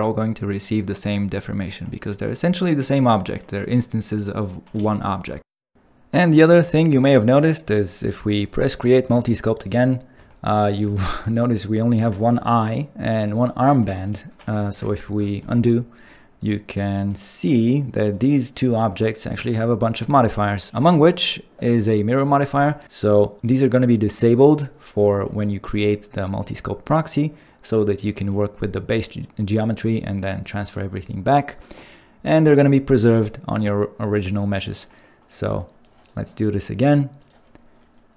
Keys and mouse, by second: 8.4-10.4 drag, 14.9 ctrl+z, 16.4 click, 17.1 click, 37.2-38.1 drag.